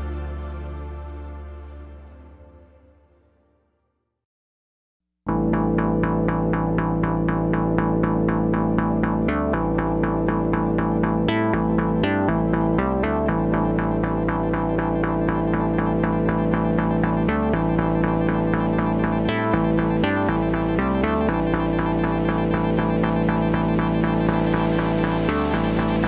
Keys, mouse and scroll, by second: 0.0-2.1 typing, 0.4 shift+middle click, 0.8 shift+middle click, 1.3 scroll down 2, 1.3 shift+middle click, 1.5 scroll up 2, 2.3 scroll down 2, 2.3 shift+middle click, 2.7 shift+middle click, 2.9 scroll up 2, 3.0 middle click, 3.2 Tab, 3.2 middle click, 3.7 scroll up 1, 3.8-5.9 typing, 3.9 Tab, 4.0 shift+middle click, 6.4 click, 7.0 s, 8.2 g, 9.2 g, 9.4 s, 9.7 Tab, 9.9 scroll up 1, 10.0 middle click, 10.1 a, 10.1 scroll down 2, 10.2 middle click, 10.5 click, 10.6-11.0 shift+middle drag, 11.0 KP_3, 11.4 click, 11.6 click, 11.7 Tab, 11.8 scroll down 1, 12.0 a, 12.1 click, 19.9 click, 20.1 scroll up 3, 20.1 shift+middle click, 20.3 shift+middle click, 20.8 click, 20.9 f, 21.1 scroll up 2, 21.1-21.4 shift+middle drag, 21.4 click, 21.6 f, 21.9-24.3 drag, 24.6-25.2 scroll down 2, 24.8 shift+middle click, 25.2 click, 25.3 a, 25.5 shift+middle click, 25.6 scroll down 1.